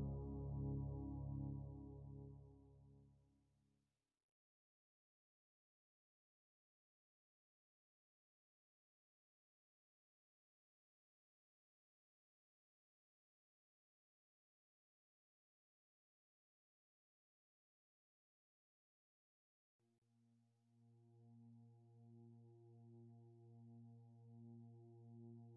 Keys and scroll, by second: 3.0 ctrl+z.